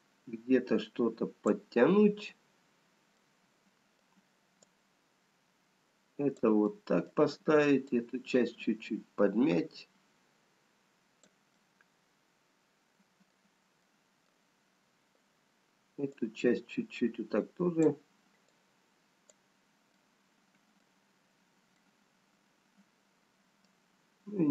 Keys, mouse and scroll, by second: 3.4 middle click, 5.6 click, 6.9 middle click, 8.3 click, 11.5 middle click, 13.9 middle click, 15.9 scroll up 2, 16.7 click, 19.8 click, 20.3 middle click, 21.7-23.8 scroll down 3, 24.1 middle click.